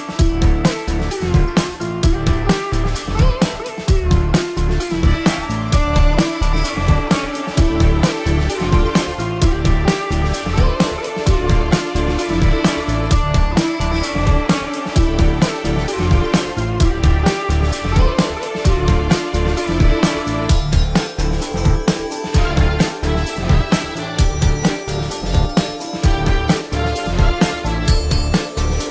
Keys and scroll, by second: 1.9 space, 5.1 space, 6.9 ctrl+alt+z, 7.6 ctrl+alt+z, 8.0 space, 8.2 ctrl+alt+z, 11.4 space, 16.0 ctrl+-, 22.7 ctrl+alt+z, 27.0 ctrl+alt+z.